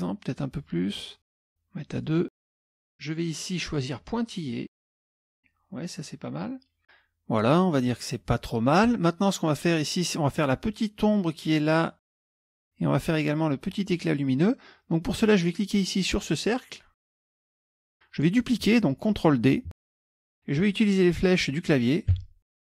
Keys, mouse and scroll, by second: 1.2 right click, 2.0 click, 3.7 click, 5.1 click, 15.6 click, 17.3 click, 19.9 ctrl+d, 22.2 Right.